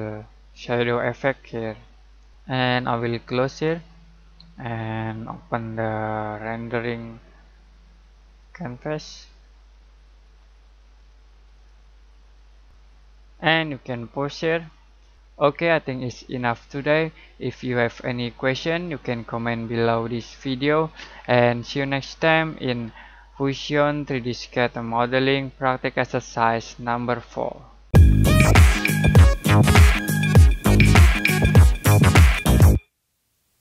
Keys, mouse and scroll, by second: 3.6 click, 6.6 click, 10.9 click, 11.9 typing, 14.5 click, 14.5 typing.